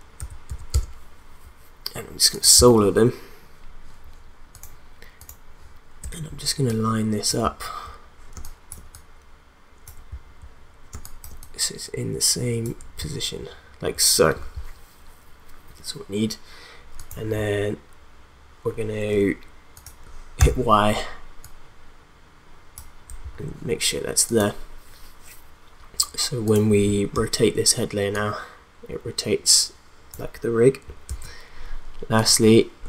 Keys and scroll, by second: 0.1 5, 0.5 0, 0.7 Return, 8.4 space, 10.9 space, 20.5 y, 27.1 r, 31.0 ctrl+z.